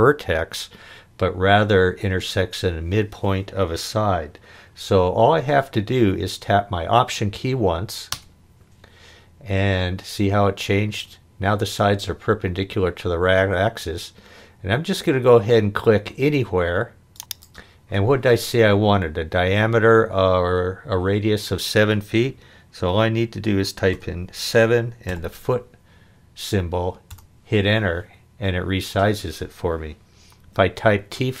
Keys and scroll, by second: 23.9 7, 25.0 ', 27.1 Return.